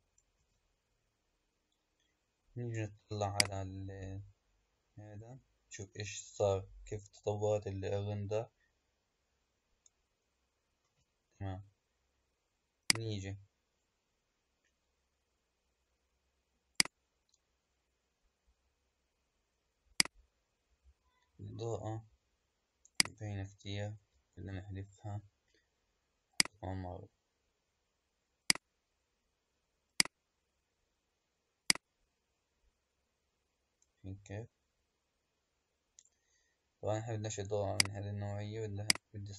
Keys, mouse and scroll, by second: 0.4 space, 3.4 click, 10.9 space, 12.9-15.8 drag, 16.7 click, 19.9 click, 22.9 click, 24.0 Delete, 26.2-29.4 drag, 31.6 click, 37.6 click, 38.8 click.